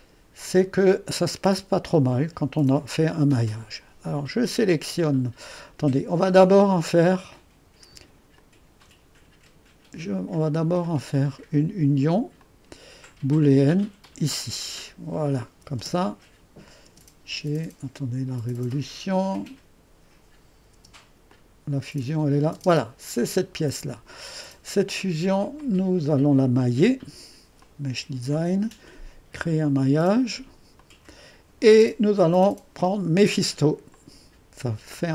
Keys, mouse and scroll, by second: 0.0-5.8 drag, 7.2-11.1 drag, 12.4 click, 14.0-15.8 drag, 15.8 space, 16.9 space, 17.5 space, 20.7 space, 21.3-22.6 drag, 22.0 space, 22.6 space, 25.6-35.1 drag.